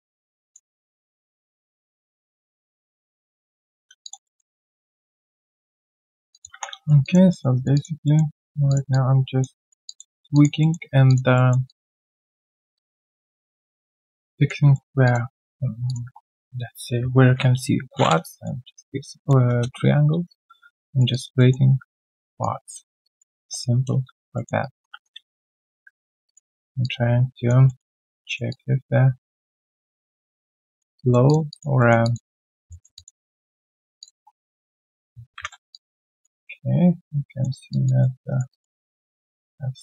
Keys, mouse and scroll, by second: 0.0 alt+click, 2.1 double click, 3.8 scroll down 1, 4.0 alt+click, 4.2 alt+middle click, 4.5 alt+click, 5.2 alt+middle click, 5.5 right click, 6.0 scroll down 1, 6.3 alt+click, 6.5 3, 7.0 alt+click, 7.3 alt+middle click, 7.5 alt+right click, 7.7 alt+click, 8.0 alt+middle click, 8.3 alt+right click, 8.9 alt+click, 9.6 alt+click, 10.1 alt+right click, 10.3 alt+click, 10.6 alt+middle click, 10.8 alt+right click, 11.1 alt+click, 11.3 alt+middle click, 11.6 alt+click, 12.4 alt+middle click, 12.7 alt+click, 13.0 alt+middle click, 13.2 alt+right click, 13.4 alt+click, 14.1 alt+middle click, 14.3 alt+click, 14.7 alt+middle click, 15.0 alt+click, 15.3 alt+middle click, 16.0 1, 17.2 ctrl+shift+x, 19.4 ctrl+s, 19.7 Return, 19.7-20.5 scroll down 1, 20.5 alt+middle click, 20.8 alt+right click, 21.1 alt+click, 21.3 alt+middle click, 23.3 Return, 23.5 scroll down 1, 24.3 alt+middle click, 24.6 alt+right click, 24.9 3, 25.2 right click, 25.6 q, 26.2 alt+click, 26.5 alt+middle click, 26.8 alt+click, 27.6 alt+middle click, 27.9 alt+click, 28.2 alt+middle click, 28.5 alt+click, 29.7 alt+middle click, 30.0 alt+click, 30.7 alt+middle click, 30.9 alt+click, 31.5 alt+click, 31.8 alt+middle click, 32.0 alt+click, 32.2 alt+right click, 32.7 alt+middle click, 32.9 alt+click, 33.2 alt+right click, 33.4 alt+middle click, 33.7 alt+right click, 34.4 alt+middle click, 35.3 ctrl+shift+x, 35.7 alt+click, 37.3 alt+middle click, 37.5 alt+right click, 37.7 alt+click, 38.0 alt+middle click, 38.3 alt+right click, 38.5 alt+click, 38.7 alt+middle click, 39.0 alt+right click, 39.2 alt+click.